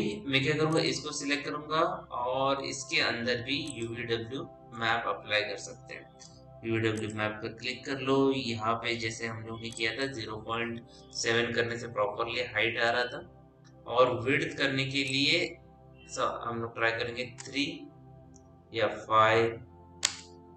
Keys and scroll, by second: 11.6 KP_0, 11.6 KP_Decimal, 11.7 KP_7, 12.5 Return, 17.0 KP_3, 17.3 Return, 18.8 KP_5, 19.9 Return.